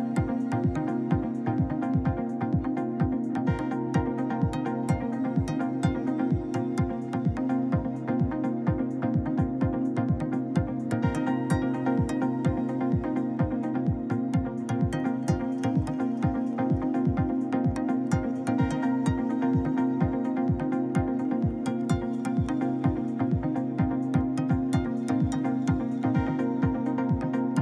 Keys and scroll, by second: 12.6 ctrl+z, 20.0 2, 20.5 Return.